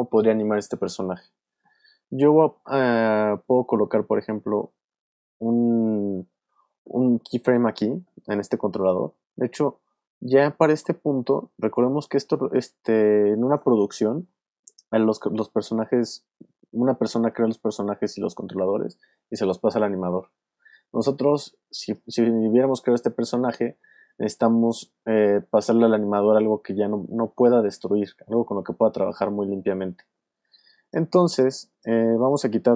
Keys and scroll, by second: 4.7 super+z, 5.4 alt+super+z.